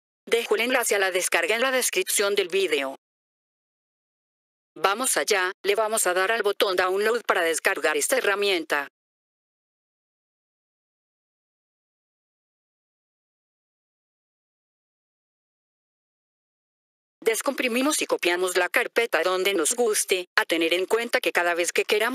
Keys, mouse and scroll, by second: 0.7 middle click, 0.7-1.5 scroll down 2, 2.3 click, 4.3 F4, 4.7 click, 6.8-8.8 drag, 12.9 F4, 14.9 click, 17.0 F4, 17.2 click, 18.9 right click.